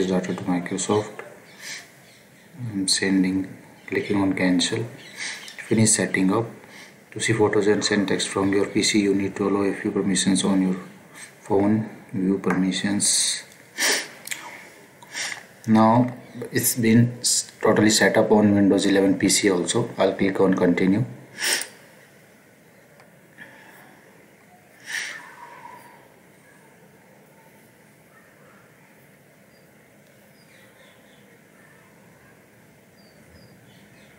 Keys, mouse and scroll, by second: 21.5 click.